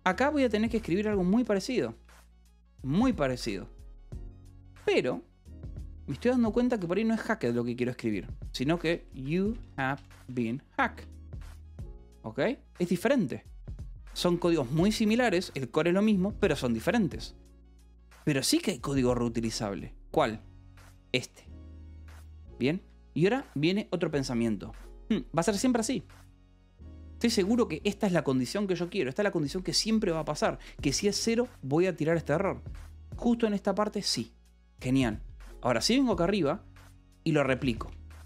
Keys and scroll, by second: 0.0-1.5 typing, 2.2 Escape, 2.7 j, 3.4 k, 6.1 h, 6.7 a, 6.8 BackSpace, 9.4-10.8 typing, 11.9 Escape, 13.9 k, 15.7 shift+v, 15.9 Escape, 16.3 j, 17.7 k, 18.7 h, 20.4-21.3 typing, 22.7 Escape, 29.0 0, 29.6 l, 30.1 v, 30.7 e, 31.8 Escape, 35.2 g, 36.0 j, 37.1-38.1 typing.